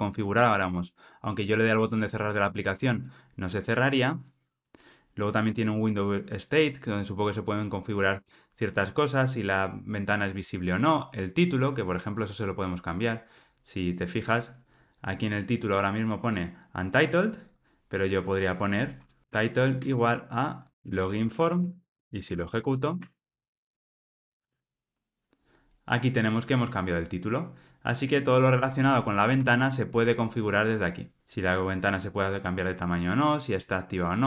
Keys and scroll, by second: 14.0 ctrl+r, 19.8 Return, 22.2 ctrl+r, 29.2 super+p.